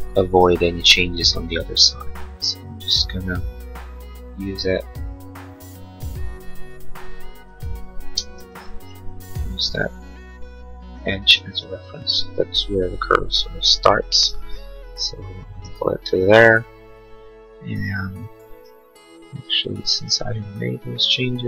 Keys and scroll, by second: 8.0 space, 8.4 Escape.